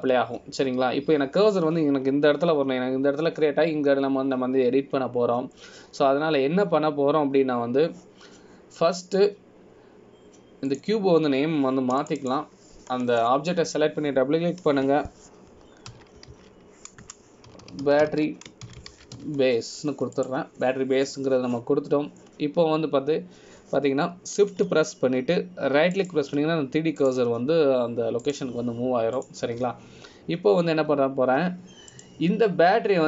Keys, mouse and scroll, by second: 12.8 click, 28.1 shift+right click.